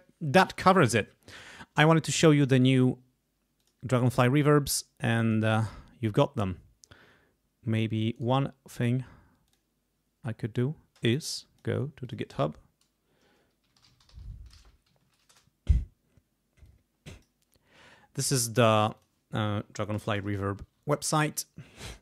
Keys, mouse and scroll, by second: 3.6-4.8 drag, 5.3 click, 8.1 right click, 9.4 click, 11.1 click, 12.0 click, 13.4-14.7 typing, 14.8 Down, 15.3 Return, 16.6 click, 17.3 click, 18.9 click, 20.5 =.